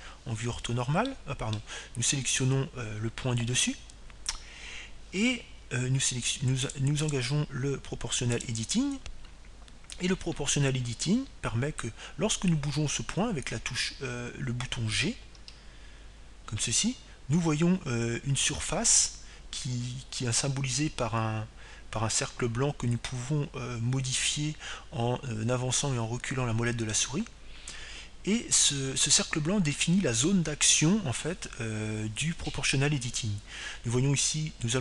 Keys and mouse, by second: 0.0 ctrl+z, 0.3 ctrl+z, 1.3 KP_3, 3.2-4.8 middle drag, 4.4-6.4 right drag, 5.5 KP_3, 8.6-10.7 drag, 10.8 click, 17.4 g.